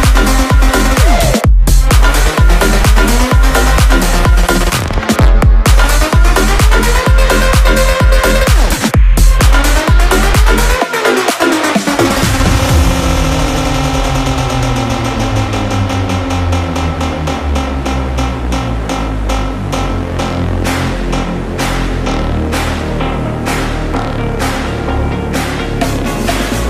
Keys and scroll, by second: 3.3 KP_0, 5.6 BackSpace, 5.6 BackSpace, 6.2 KP_0, 8.0 KP_0, 12.7 ctrl+space, 24.2 KP_0, 26.5 space.